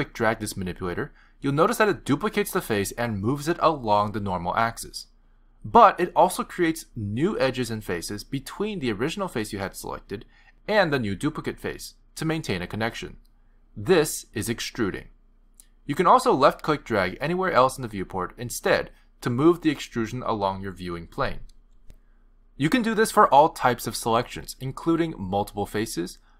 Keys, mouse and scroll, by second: 0.0 click, 8.2 middle click, 9.0 middle click, 11.5 middle click, 18.6 click, 23.6 middle click, 25.2 click, 26.2 shift+click.